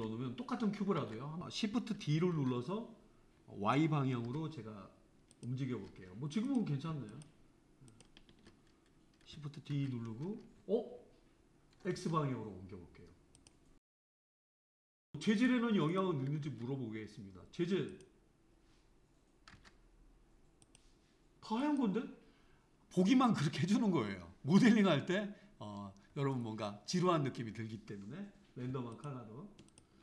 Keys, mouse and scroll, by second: 1.3 click, 2.4 shift+d, 6.5 click, 7.1 shift+click, 7.9 shift+click, 9.8 shift+d, 13.7-15.4 shift+middle drag, 15.4 click, 15.9 click, 16.8 click, 18.1 click, 19.7 click, 28.9 shift+click, 29.7 shift+click.